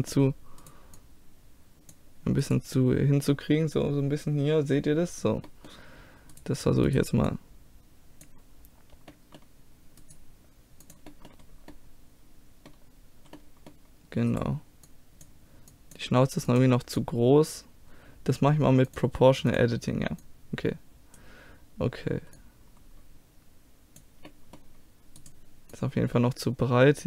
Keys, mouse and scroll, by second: 0.6 click, 1.0 middle click, 1.9-4.1 drag, 1.9-5.5 right drag, 6.3-8.8 right drag, 7.3-9.1 drag, 9.1 middle click, 10.0-11.7 drag, 11.7-14.3 middle drag, 14.3-22.3 drag, 14.9 middle click, 14.9-16.1 right drag, 22.4-24.3 drag, 24.3-26.9 middle drag, 25.2-27.0 drag, 25.7-27.0 right drag.